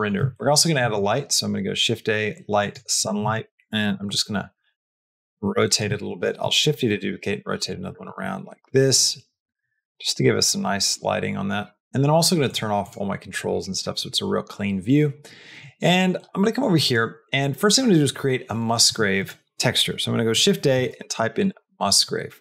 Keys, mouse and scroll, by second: 0.2 shift+middle click, 0.6 shift+a, 2.9 r, 4.0 r, 4.7 r, 5.9 shift+d, 6.8 r, 7.7 r, 10.2 shift+r, 12.3 click, 12.7 click, 16.3 middle click, 16.7 click, 18.7 shift+a.